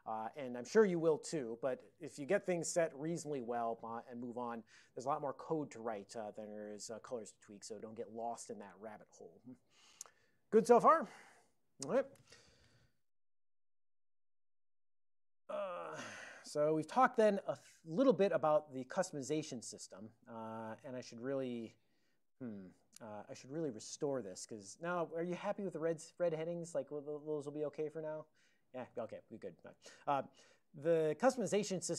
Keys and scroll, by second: 12.7 ctrl+x, 12.8-14.2 typing, 14.9 alt+n, 17.0 Tab, 18.1 ctrl+n, 18.6 ctrl+n, 18.8 ctrl+n, 19.0 ctrl+l, 24.3 ctrl+p, 24.5 ctrl+p, 24.6 ctrl+p, 25.1 ctrl+p, 29.0 ctrl+l.